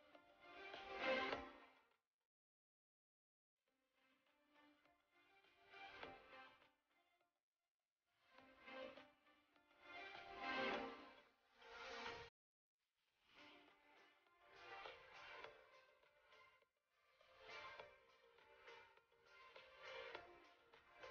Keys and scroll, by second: 9.9 shift+space, 13.1 shift+space.